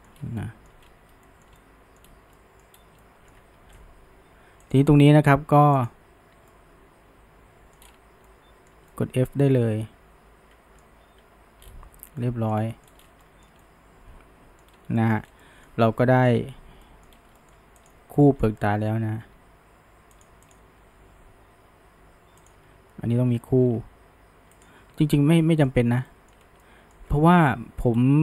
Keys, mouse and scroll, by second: 0.2 scroll, 0.4-0.8 shift+middle drag, 0.8-1.3 scroll, 1.3-2.0 shift+middle drag, 2.0-2.4 scroll, 2.4-2.8 middle drag, 2.8 scroll, 3.0-3.6 shift+middle drag, 3.6 ctrl+z, 4.7 drag, 5.8 shift+click, 6.5-7.8 middle drag, 7.8-8.3 scroll up 1, 8.3-11.2 shift+middle drag, 11.2 f, 11.6-12.2 scroll down 1, 12.2-12.9 shift+middle drag, 12.9 scroll up 1, 13.0 scroll down 1, 13.2-14.7 shift+middle drag, 14.7 scroll up 1, 15.0 shift+middle drag, 15.3 scroll down 1, 15.4-17.1 middle drag, 17.1 scroll up 1, 17.4-17.8 shift+middle drag, 17.8 click, 18.2-19.2 middle drag, 19.2 g, 20.5 click, 20.8 g, 25.0-26.4 shift+middle drag, 26.6-27.9 middle drag, 27.9-28.2 scroll.